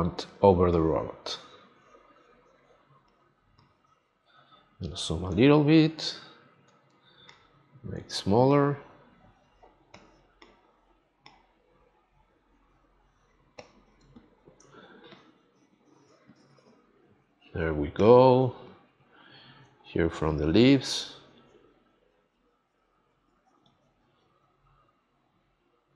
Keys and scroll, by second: 14.0 space.